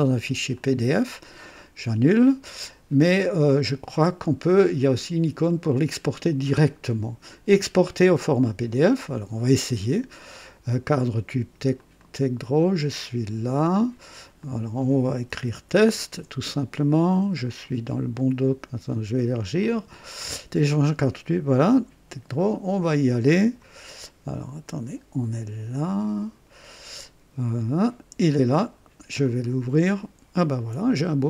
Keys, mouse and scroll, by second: 0.5 click, 1.4 click, 3.4 click, 5.6 click, 8.7 click, 11.7 click, 14.4 click, 15.1-16.6 typing, 19.6 click, 21.6 click, 23.4 click, 24.6 click, 25.8 click, 29.2 click, 30.8-31.2 ctrl+scroll down 2.